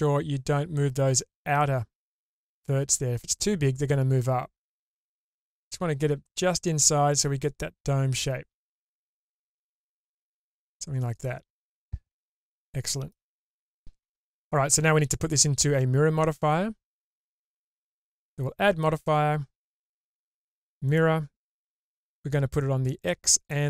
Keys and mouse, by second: 11.7-13.1 middle drag, 15.4 middle click, 18.2 click, 20.9-23.5 drag.